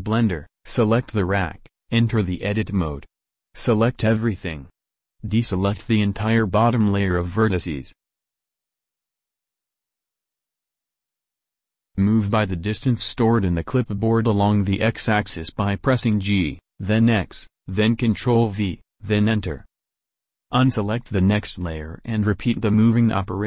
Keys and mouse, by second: 1.8-3.2 right drag, 3.2 Tab, 4.4 a, 4.9 a, 6.6 middle click, 7.6-8.8 drag, 9.2 middle click, 10.0-14.1 drag, 14.1 g, 17.9-19.4 drag, 18.6 g, 20.7-22.1 drag, 21.3 g.